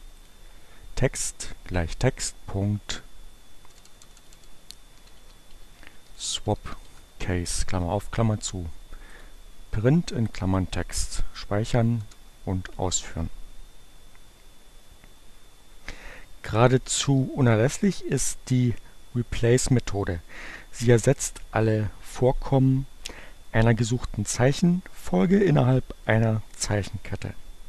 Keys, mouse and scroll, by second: 0.2 click, 2.4 click, 3.1 BackSpace, 4.5-7.2 typing, 9.2 click, 10.0 click, 11.7 Up, 12.0 Return.